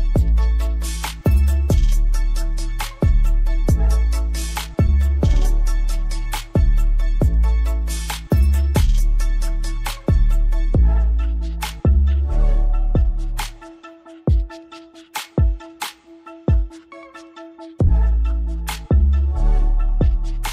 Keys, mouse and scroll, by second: 0.2 click, 2.6 right click, 3.3 click, 9.1 scroll down 1, 9.7 scroll up 1, 12.6 click.